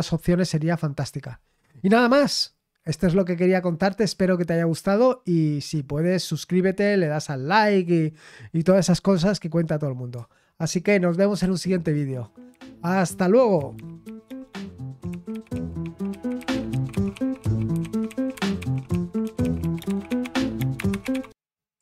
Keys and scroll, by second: 11.4 super+x.